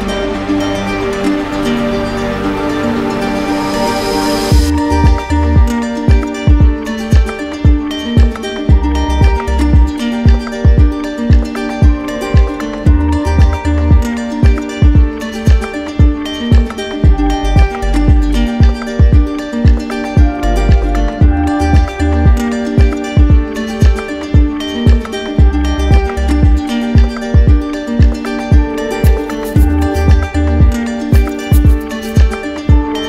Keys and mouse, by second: 3.0-4.0 right drag, 5.0-6.0 drag, 6.5-7.5 drag, 9.2-10.3 drag, 12.9 click, 17.0 click, 18.8 click, 19.5 click, 21.5 z, 22.7 z, 24.4 click, 26.4 click, 27.1 right click, 28.1 alt+right click, 30.1 right click, 31.6 right click.